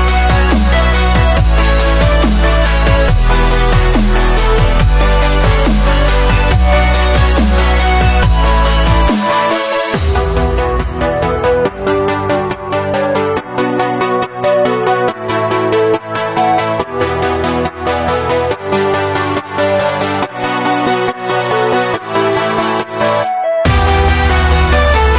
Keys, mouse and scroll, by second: 2.0 middle drag, 2.3 scroll up 1, 2.5-2.9 middle drag, 2.9 click, 3.1 middle click, 3.2-3.6 scroll up 1, 3.6 click, 4.0 scroll down 1, 4.1-4.8 middle drag, 4.8-5.8 drag, 5.8-6.9 middle drag, 6.9 click, 7.7-9.1 right drag, 9.1-9.5 middle drag, 9.5 click, 9.7 click, 9.8-10.5 middle drag, 10.5 ctrl+a, 11.2 middle click, 11.6-12.6 right drag, 12.6 scroll up 1, 12.7-13.2 middle drag, 13.2 click, 13.4-13.9 middle drag, 13.9-14.6 drag, 14.6 s, 18.1 s, 20.1-21.1 middle drag, 21.1 click, 21.6 ctrl+a, 22.1-25.0 drag, 25.0 a.